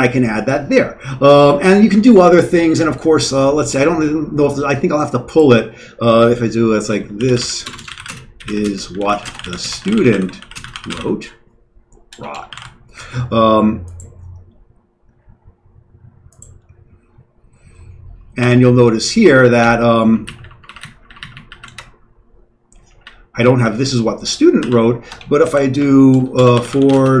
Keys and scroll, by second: 6.9-13.0 typing, 18.4 q, 19.6 Down, 20.2 Down, 20.4-21.1 Down, 21.3 Down, 21.5 Down, 21.7 Return, 22.8 Down, 23.0 Down, 23.2 Down, 24.6-27.2 typing, 25.1 Escape.